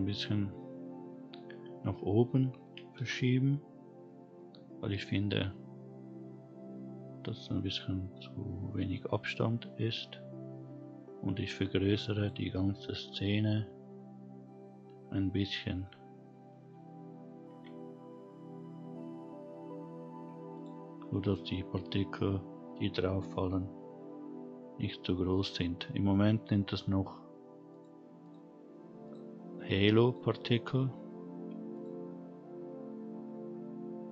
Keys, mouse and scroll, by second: 2.6 g, 7.1-9.9 scroll down 1, 9.9 scroll down 1, 11.5-12.2 drag, 17.5 s, 21.0-21.9 scroll up 2, 23.1-24.2 scroll down 2, 23.4-24.2 scroll up 1, 24.2-25.2 scroll up 1, 27.7 click, 28.2 click, 29.0 click, 30.0 click, 31.7 click.